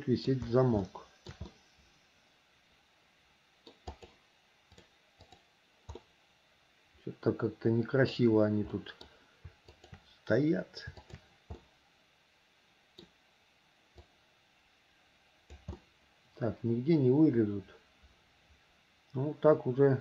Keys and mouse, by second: 1.0 shift+middle click, 1.6-2.9 middle drag, 2.9 click, 2.9 right click, 3.6 middle click, 5.5-6.6 drag, 6.1 right click, 6.6 middle click, 6.8 click, 7.0 middle click, 7.1-8.3 drag, 7.1-8.3 right drag, 8.9 click, 8.9 right click, 9.9 shift+click, 11.1 shift+click, 11.8 middle click, 12.2-13.2 drag, 12.2-13.2 right drag, 14.3-15.8 drag, 16.0-20.0 middle drag.